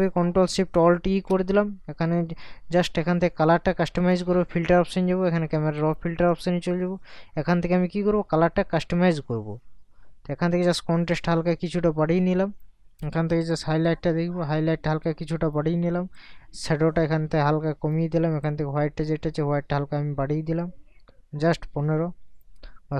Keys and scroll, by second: 1.0 ctrl+alt+shift+e.